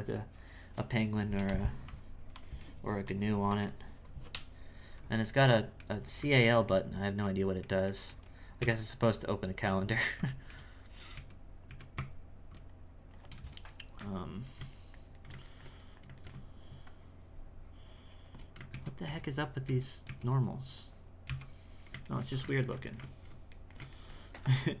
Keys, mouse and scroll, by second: 5.5 middle click, 6.0-6.5 scroll up 3, 6.5 alt+middle click, 7.2-8.6 alt+middle drag, 8.6 KP_1, 9.5-10.2 scroll down 5, 10.2 shift+middle click, 11.0 scroll down 1, 11.1 z, 11.6 z, 11.9 Tab, 14.8-16.9 shift+middle drag, 16.9-18.7 shift+drag, 18.7 ctrl+z, 20.0 z, 20.4 middle click, 21.2 KP_1, 22.1-24.8 ctrl+shift+middle drag.